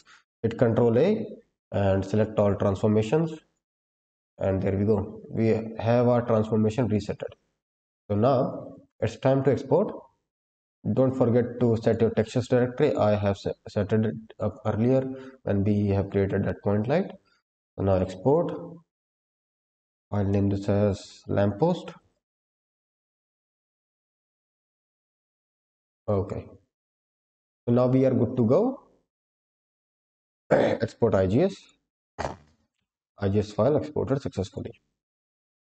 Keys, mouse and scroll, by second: 0.8 ctrl+a, 7.2-8.8 scroll up 6, 8.8 click, 9.4-10.1 scroll up 3, 10.1 scroll down 1, 10.2-10.9 scroll down 3, 11.7 drag, 14.9-16.0 scroll up 4, 16.0-17.4 scroll up 2, 17.4 click.